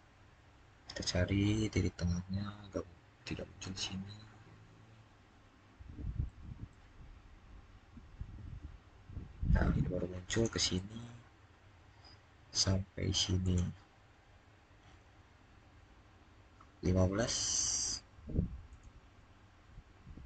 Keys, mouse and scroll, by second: 6.0 scroll up 1, 7.5-8.0 scroll down 1, 10.1 click, 13.2 click, 14.9 scroll up 1, 15.4-16.0 scroll down 1, 17.0-18.5 middle drag, 18.5 click.